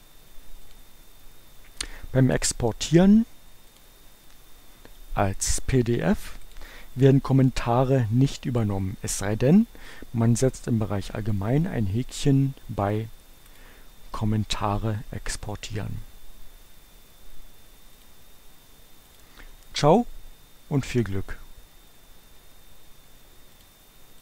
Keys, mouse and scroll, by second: 0.6 click, 3.8 click, 6.5 click, 13.2 click, 17.1-18.5 drag, 19.2 click, 23.5 click.